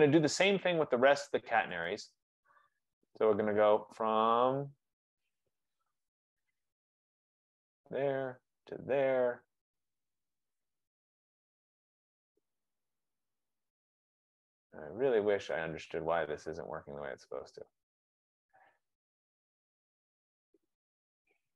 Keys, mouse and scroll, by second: 1.9 right click, 6.2 click, 8.1 click, 9.1 click, 11.3 click.